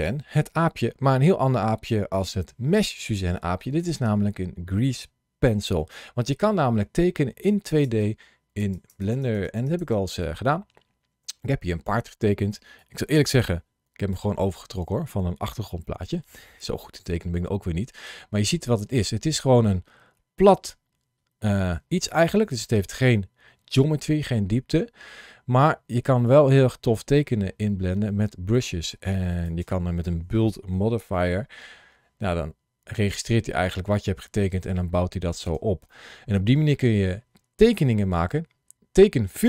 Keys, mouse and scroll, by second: 3.4-4.1 scroll down 1, 4.1-7.3 scroll up 1.